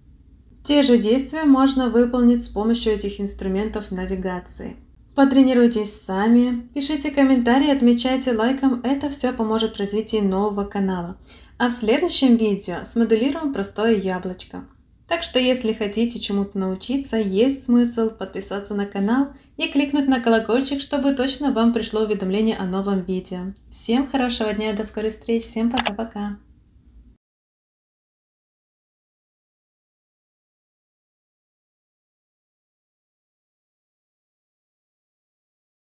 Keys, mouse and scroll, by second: 2.4 click, 4.8 click, 6.0 click, 17.0 middle click.